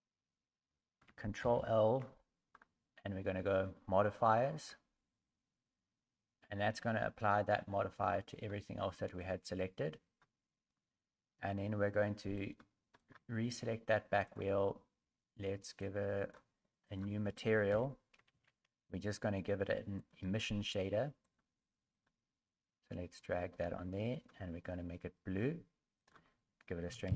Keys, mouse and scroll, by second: 1.4 ctrl+l, 12.4 right click, 13.0 right click, 14.2 click, 15.8 click.